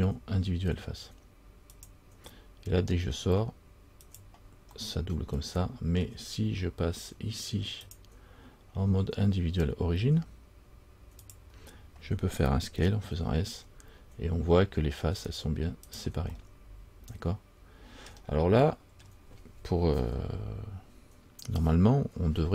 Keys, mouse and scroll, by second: 5.0 middle click, 8.0 click, 16.5 middle click, 18.3 scroll down 1.